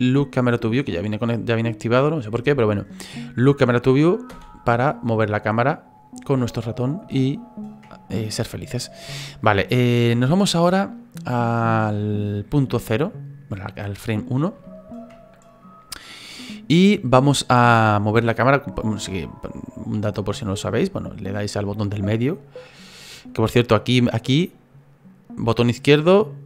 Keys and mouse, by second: 0.8 click, 1.2 click, 7.1 shift+middle click, 9.0 shift+middle click, 10.9 middle click, 12.4 click, 14.6 shift+middle click, 16.0 middle click, 20.7 middle click, 21.7 middle click, 24.8 click.